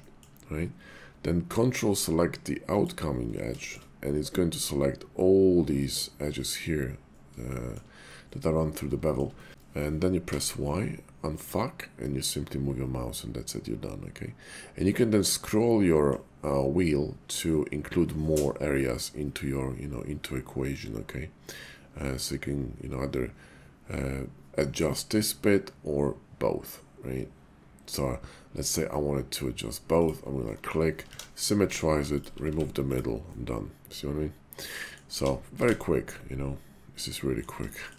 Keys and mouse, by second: 2.6 ctrl+click, 3.6 shift+middle click, 7.4 shift+middle click, 8.5 middle click, 8.9 shift+middle click, 9.4 middle click, 9.5 y, 10.3 y, 14.9-16.1 middle drag, 30.0 click, 30.5 middle click, 31.1 alt+x, 31.6 Tab, 33.3-34.9 drag, 33.3 x, 35.2 alt+x, 35.7 alt+x, 36.1 click, 37.7 shift+click.